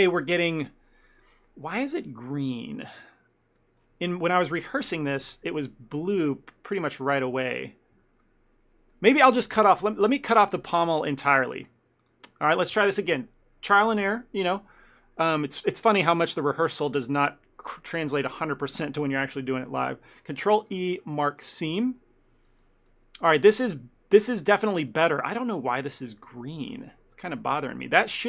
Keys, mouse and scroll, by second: 0.3 scroll up 1, 0.8 scroll down 2, 1.8 scroll down 3, 2.1 scroll down 2, 3.0 scroll down 2, 3.2 shift+middle click, 3.9-4.4 scroll up 7, 4.5 shift+middle click, 5.0 scroll down 1, 5.3 shift+middle click, 8.3 ctrl+middle click, 9.3 ctrl+z, 10.0 ctrl+middle click, 10.2 shift+middle click, 10.8 middle click, 12.1 alt+click, 15.5 ctrl+middle click, 15.7 middle click, 16.1 shift+middle click, 16.4 ctrl+middle click, 20.7 ctrl+e, 22.6 shift+middle click, 23.0 ctrl+middle click, 23.7 shift+middle click, 26.8 ctrl+middle click.